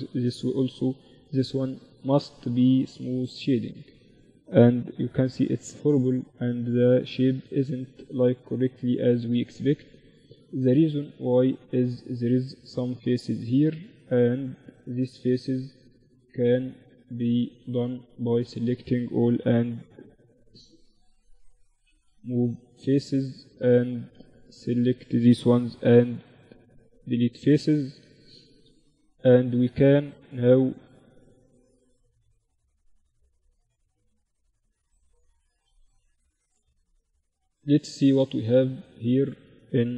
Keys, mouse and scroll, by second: 3.0 Tab, 3.3 Tab, 4.1 t, 4.9-6.2 drag, 5.1 t, 6.2 middle click, 7.1 Tab, 10.3 middle click, 11.0-13.3 drag, 11.9-13.3 right drag, 12.4-14.5 middle drag, 13.3 z, 14.5-16.1 drag, 14.9-16.1 middle drag, 14.9-19.4 right drag, 18.6 x, 19.9 z, 20.9-25.3 middle drag, 21.7 z, 22.5-25.3 right drag, 23.8 x, 25.7 z, 26.7 Tab, 28.0 Tab, 30.3 ctrl+r, 32.4 ctrl+r, 34.9 z, 35.1 Tab, 37.0 KP_1, 37.9 z.